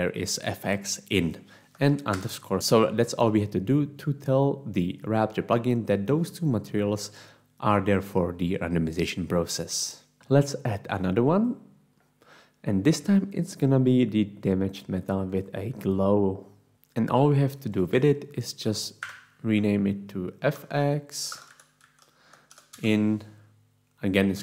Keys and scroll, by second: 19.4 Home, 20.4-22.5 typing, 22.7 Insert, 24.2-24.4 typing.